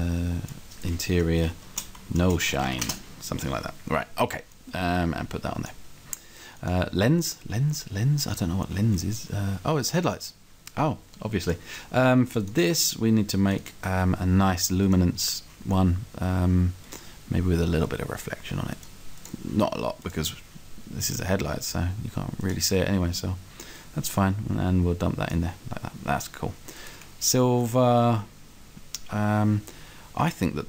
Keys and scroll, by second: 1.2-2.6 typing, 2.9 Return, 9.1 s.